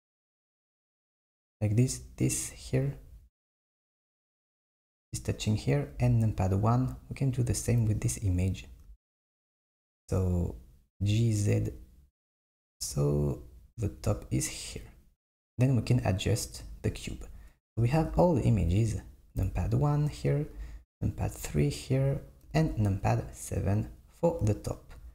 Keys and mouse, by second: 6.0 KP_1, 7.4 click, 7.9 g, 18.0 KP_1, 18.5 KP_2, 19.4 KP_1, 20.6 KP_3, 22.5 KP_7.